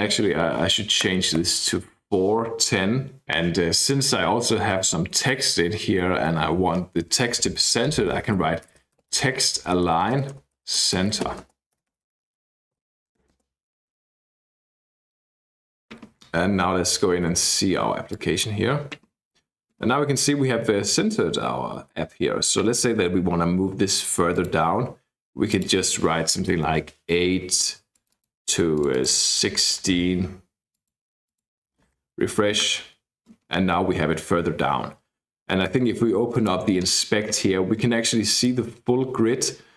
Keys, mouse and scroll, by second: 0.5 Left, 1.1 BackSpace, 1.4 4, 8.1-13.7 typing, 15.0 click, 15.7 click, 17.2 ctrl+r, 18.1 click, 24.4 click, 25.5 click, 26.4 BackSpace, 26.7 8, 27.9 click, 28.7 click, 29.4 1, 30.7 click, 31.3 click, 31.9 ctrl+r, 36.3 click, 38.4 click.